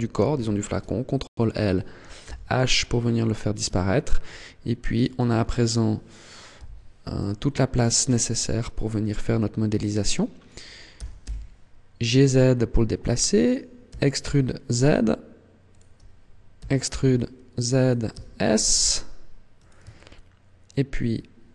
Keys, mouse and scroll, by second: 0.1 ctrl+l, 2.0 h, 2.5-3.3 scroll up 1, 3.3-3.6 scroll up 2, 5.0 alt+right click, 6.3 n, 7.1 shift+middle click, 8.0 t, 10.7 g, 13.2 click, 13.6 e, 15.6 click, 16.4 e, 17.6 click, 17.9 s, 19.5 click, 19.7 shift+middle click.